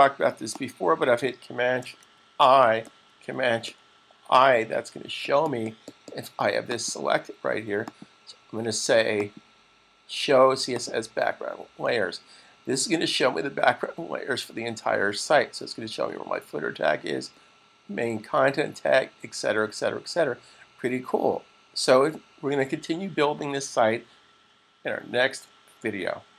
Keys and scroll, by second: 3.8 shift+super+i.